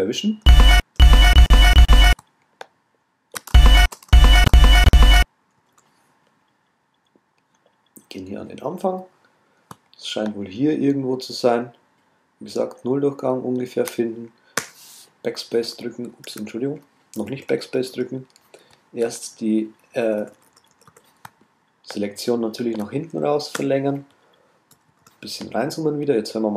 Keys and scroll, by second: 16.3 super+z.